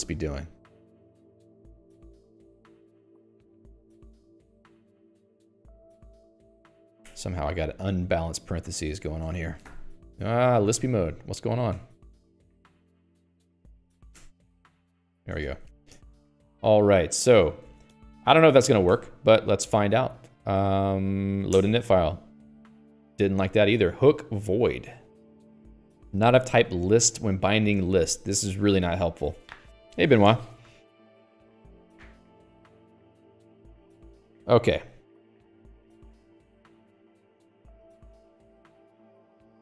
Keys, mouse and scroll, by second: 0.0 Escape, 1.2 alt+x, 1.6-13.4 typing, 3.0 Escape, 3.2 Escape, 10.5 Escape, 14.2 ctrl+j, 15.3-17.8 typing, 15.7 Escape, 16.1 ctrl+s, 16.2 Escape, 18.0 ctrl+s, 18.3 Escape.